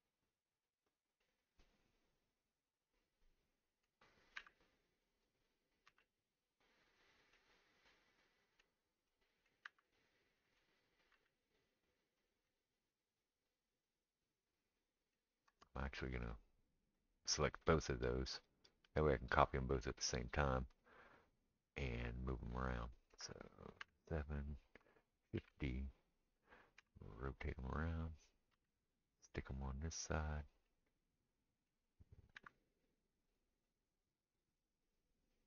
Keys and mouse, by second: 0.6-2.4 middle drag, 2.4-7.9 right drag, 4.4 r, 5.9 g, 7.9-9.7 middle drag, 9.6 r, 9.7-11.2 right drag, 11.1 g, 11.2 middle click, 11.7-14.3 right drag, 14.3-16.4 middle drag, 15.6 shift+click, 15.6 shift+right click, 16.4-33.5 right drag, 16.9 click, 19.3 click, 23.8 KP_7, 25.3 shift+d, 26.8 r, 28.5 g, 29.0-31.7 middle drag, 32.4 r, 33.5-35.3 middle drag, 35.3 right click, 35.4 middle click.